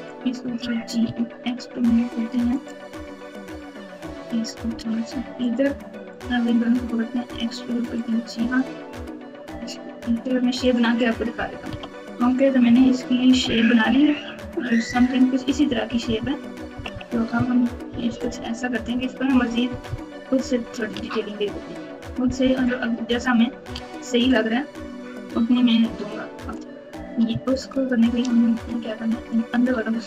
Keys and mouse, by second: 0.5 g, 3.6 click, 4.6 g, 6.1 click, 7.2 e, 8.5 click, 9.4 g, 11.6 KP_Multiply, 12.3 KP_Subtract, 13.4 ctrl+KP_8, 13.9 ctrl+KP_8, 15.6-18.3 typing, 19.6 KP_4, 19.8 KP_4, 20.9 Tab, 22.3 KP_7, 23.7 alt+z, 25.5 click, 25.7 click, 27.5 shift+click, 29.4 shift+click.